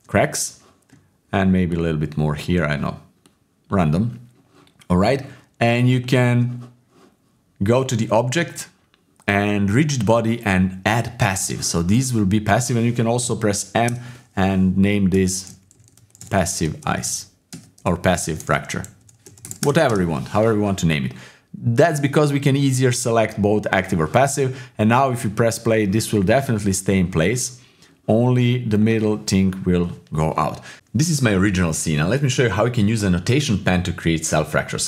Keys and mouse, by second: 1.8 shift+click, 3.4 shift+click, 5.9 shift+click, 7.8-11.4 drag, 13.2 m, 15.9 s, 17.8 BackSpace, 19.9 Return, 21.8 click, 25.0 click, 25.7-28.0 drag, 28.7 click, 29.4 middle click, 31.0 middle click, 31.1 ctrl+s, 32.2 KP_7, 32.6 w.